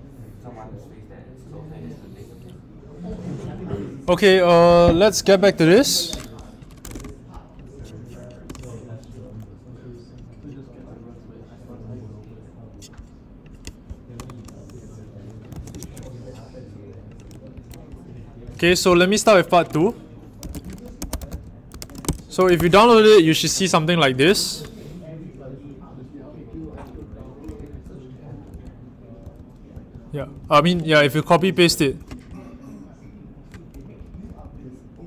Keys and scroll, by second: 15.5 super+a, 15.8 super+c, 17.5 Right, 18.1 ctrl+Right, 20.1-22.9 typing, 26.2-30.3 typing, 31.4-32.3 typing, 33.9-35.0 typing.